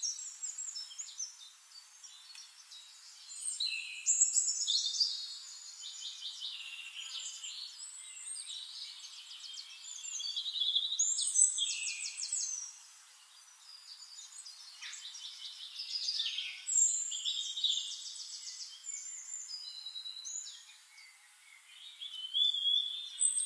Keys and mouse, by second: 2.8-4.9 drag, 4.9 ctrl+z, 5.7-10.2 shift+drag, 8.2-10.2 shift+right drag, 8.7-10.2 middle drag, 11.7-13.3 drag, 13.4 ctrl+g, 14.1-16.4 ctrl+shift+drag, 17.0 ctrl+d, 17.4-20.0 drag, 21.3-23.4 drag.